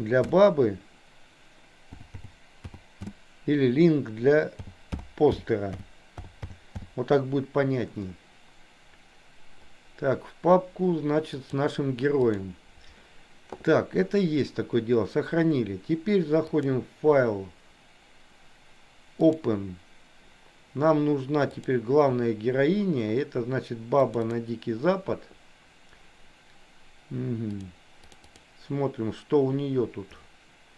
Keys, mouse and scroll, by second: 16.6-19.5 drag.